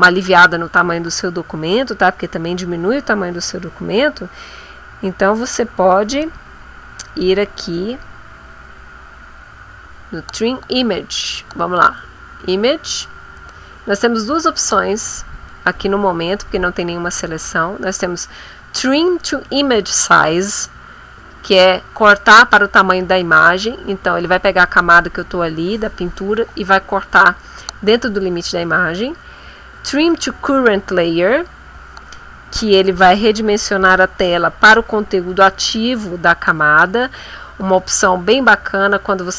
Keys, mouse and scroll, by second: 11.8 click.